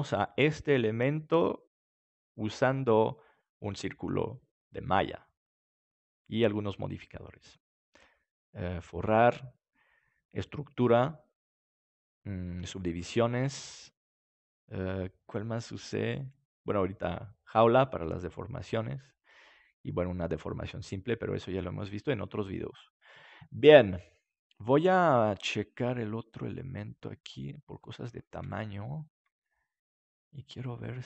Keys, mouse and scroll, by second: 26.3-28.1 drag, 28.6-30.3 right drag, 29.5 s.